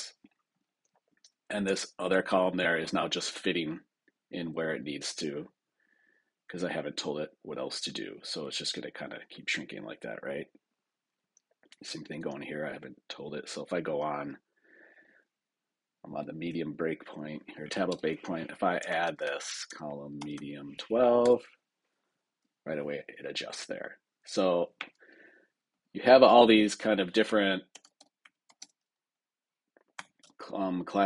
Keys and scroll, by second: 17.8 super+Return, 21.1 Return.